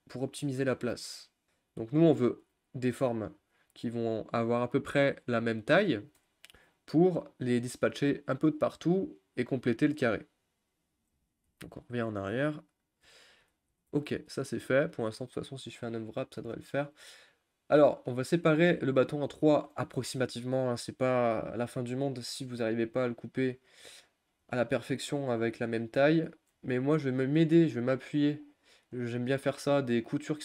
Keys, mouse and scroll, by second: 1.4 click, 11.6 ctrl+z, 12.0 ctrl+z, 12.3 ctrl+z, 13.0 ctrl+z, 13.9 ctrl+z, 14.2 ctrl+z, 15.4 click, 16.1-18.8 middle drag, 18.8-19.2 scroll up 2, 19.2 shift+middle click, 20.0 scroll up 1, 20.2-21.5 shift+middle drag, 21.5 click, 21.9 scroll up 1, 22.0 middle click, 22.6-23.0 scroll up 5, 23.0 middle click, 23.8 shift+click, 23.9 scroll up 1, 24.0-25.2 middle drag, 25.2 shift+click, 25.5 middle click, 26.1 shift+click, 26.7 ctrl+z, 27.2 shift+click, 27.8 shift+click, 28.3 scroll down 1, 28.5 middle click, 29.5 shift+click, 29.7-30.4 middle drag.